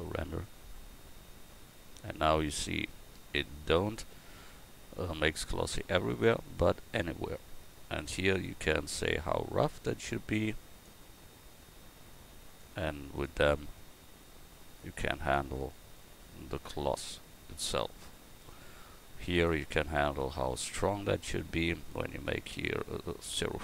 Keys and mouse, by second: 0.0-1.0 drag, 11.1-23.6 drag.